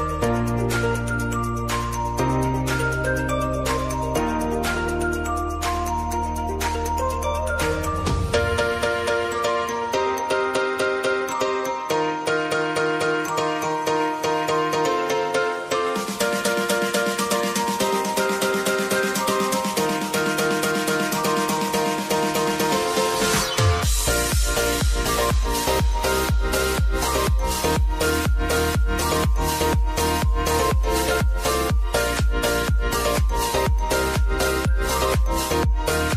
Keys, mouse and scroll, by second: 1.4-2.8 drag, 2.8 space, 4.9 space, 5.4 j, 6.1 click, 6.5 u, 7.6-14.0 drag, 14.0 Return, 15.7-18.5 drag, 19.7 ctrl+alt+Home, 21.2 click, 25.3 F4, 26.1 click, 28.3 s, 28.9-30.8 drag, 31.4 Return, 32.1 click, 32.8-33.2 typing, 35.2-36.1 drag.